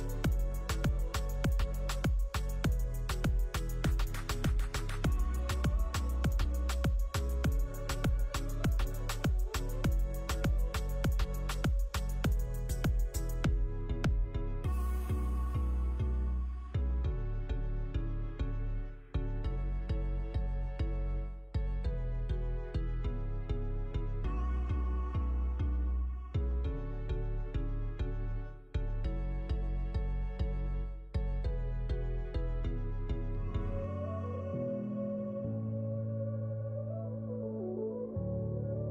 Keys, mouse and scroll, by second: 0.2 shift+a, 2.0 click, 6.3 click, 6.8 click, 7.4 scroll down 2, 7.7 click, 8.0 click, 8.3 click, 8.6 Tab, 9.0 a, 10.0 right click, 10.0 u, 11.4 click, 11.9 a, 13.5 u, 14.0 a, 14.0 r, 17.3 s, 18.8 scroll up 3, 18.8 s, 20.8-23.0 scroll down 2, 26.7 click, 27.1 Tab, 27.4 click, 28.7 Tab, 29.4 s, 35.0 click, 35.0 a, 35.1 s, 36.5 middle click.